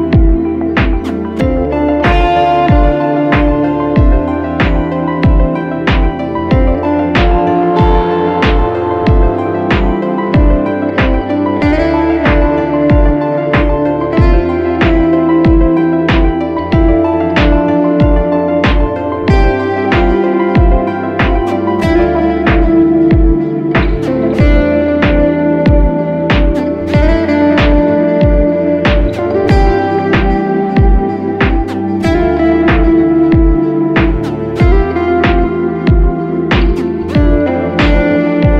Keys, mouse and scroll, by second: 2.8-6.1 scroll up 1, 6.5 e, 19.9 double click, 30.1-30.9 ], 35.7-36.1 typing, 37.6 [, 38.2 double click.